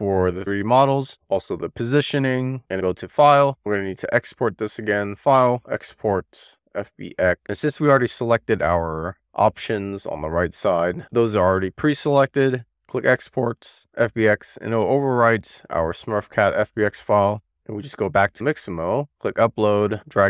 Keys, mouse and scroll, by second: 0.6 click, 2.4 a, 5.1-7.3 drag.